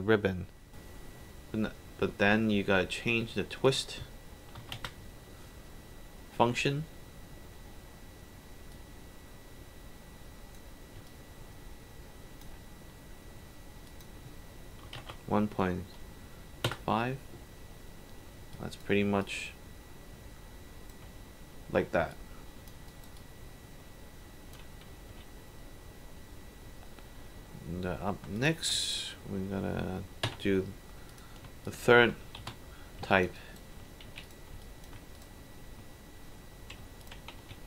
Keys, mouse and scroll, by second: 3.6 click, 4.6 KP_1, 4.8 Return, 8.7-10.5 drag, 11.1-12.4 alt+drag, 13.9 click, 14.9 KP_1, 15.0 KP_1, 15.6 KP_5, 16.7 Return, 18.5 alt+drag, 19.2-20.6 drag, 22.1-22.7 alt+drag, 22.9 alt+right drag, 23.1-24.5 alt+drag, 25.2 click, 28.4 click, 28.8 ctrl+click, 30.3 ctrl+h, 31.1 click, 31.6 shift+click, 32.5 shift+h, 33.1 alt+click, 33.4 alt+right click, 34.2 right click, 34.2 alt+click, 34.6 alt+click, 35.1 alt+click, 37.0 ctrl+click, 37.5 ctrl+w.